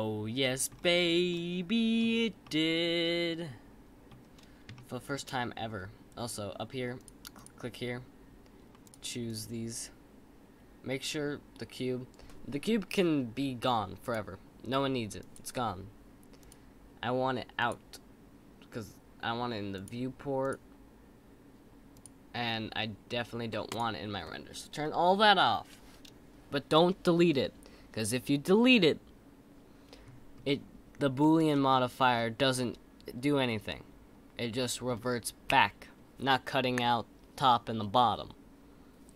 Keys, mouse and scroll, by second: 0.7-1.3 scroll up 4, 1.3-2.0 middle drag, 2.0-2.4 scroll down 3, 2.4-4.2 middle drag, 4.2-4.7 scroll down 2, 4.7-6.9 shift+middle drag, 6.9 click, 7.3-10.3 drag, 14.0 click, 15.2 click, 16.5 click, 20.4 click, 21.9 click, 23.7 click, 30.4-31.2 scroll up 3, 31.2-35.7 middle drag.